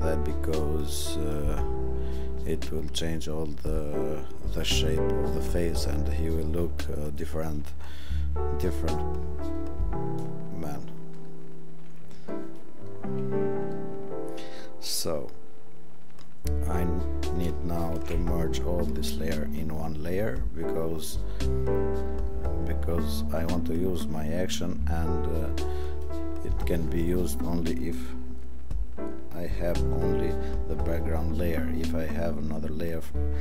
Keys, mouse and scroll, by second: 11.2 click, 12.3 click, 17.9 ctrl+shift+e, 22.2 click.